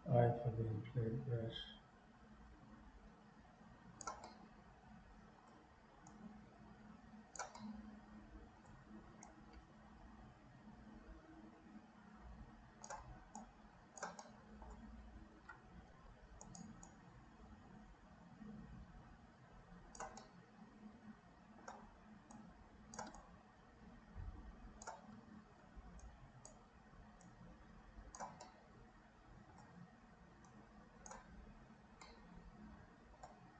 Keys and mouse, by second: 0.0-4.1 drag, 4.4 middle click, 5.2 middle click, 6.2-7.5 drag, 7.7 middle click, 9.4-12.8 shift+drag, 13.5 click, 14.3 middle click, 16.9-20.1 drag, 20.3 click, 20.3 right click, 20.4-21.7 middle drag, 22.3 click, 23.3-25.0 shift+drag, 26.1 shift+click, 27.2-28.3 shift+drag, 28.5-29.6 middle drag, 30.6 click, 32.2-33.3 middle drag.